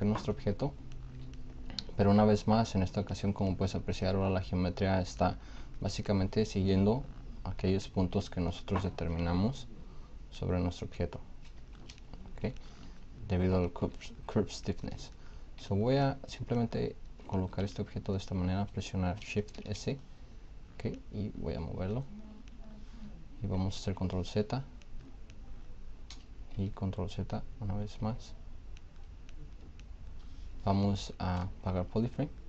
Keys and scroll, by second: 19.4 shift+s, 23.6 ctrl+z, 26.4 ctrl+z, 27.9 ctrl+z, 31.5 shift+f.